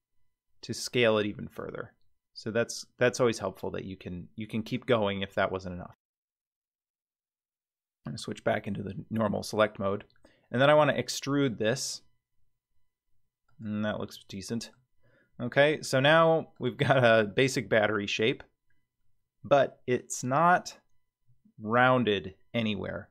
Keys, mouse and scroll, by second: 6.9 click, 8.8-9.2 scroll up 4, 9.5-10.7 scroll down 3, 10.7 e, 14.1 middle click, 15.0 scroll down 2, 15.5 middle click, 16.1-16.6 scroll down 3, 16.5 click, 17.3-20.0 middle drag, 21.2-21.9 scroll up 3, 22.6-23.1 scroll up 2.